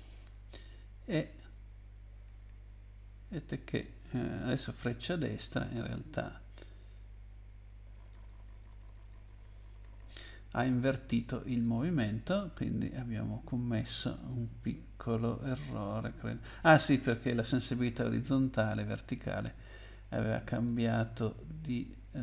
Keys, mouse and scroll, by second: 0.7 Right, 1.1 Right, 1.6 Right, 2.0 Right, 3.0 Right, 3.6 Right, 5.4 Right, 5.8 Right, 6.1 Left, 6.6 Left, 6.8 Left, 11.5 click, 12.5-13.9 scroll down 8, 14.6-15.0 scroll down 2, 18.7 click.